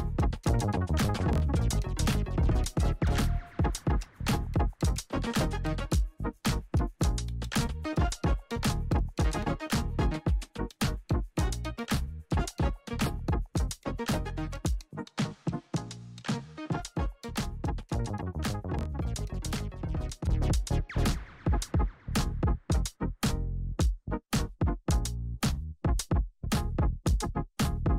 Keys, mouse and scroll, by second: 0.8 click, 5.8 click, 8.9 click, 11.5 ctrl+c, 12.2 click, 14.0 ctrl+v, 15.3-17.4 drag, 19.8 click, 24.1 ctrl+alt+Home, 26.4 click.